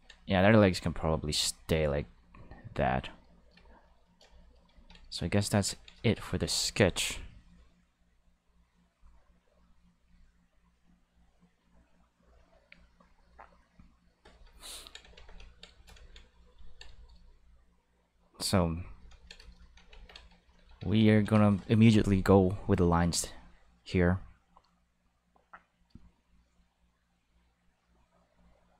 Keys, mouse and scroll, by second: 0.2 click, 0.8 click, 1.1 click, 1.5 click, 1.9 click, 2.3 click, 8.0-9.9 drag, 10.5-14.2 drag, 15.1 ctrl+s, 18.0 click, 19.9 ctrl+s, 20.8 ctrl+s, 22.6 click.